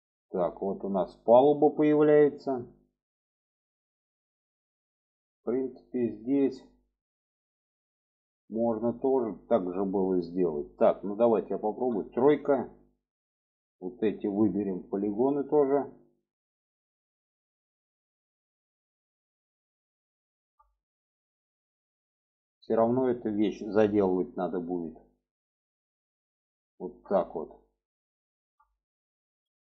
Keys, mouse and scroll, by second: 2.2-5.7 middle drag, 6.0-6.4 shift+middle drag, 6.6 middle click, 7.6-8.6 shift+middle drag, 9.8 middle click, 11.5 3, 12.1 click, 13.0 shift+click, 13.4 shift+drag, 14.0 shift+drag, 14.6 shift+drag, 15.7 shift+click, 16.4 shift+click, 17.0 shift+click, 17.9 shift+click, 18.3 shift+click, 18.9-19.4 middle drag, 19.7-20.0 shift+middle drag, 20.6 middle click, 21.2 shift+middle drag, 22.0 shift+click, 22.5 shift+click, 23.8 shift+click, 24.7 shift+click, 25.1 shift+click, 25.7 shift+click, 26.4 shift+click, 27.2 middle click, 28.0 shift+middle click, 28.5 alt+middle click.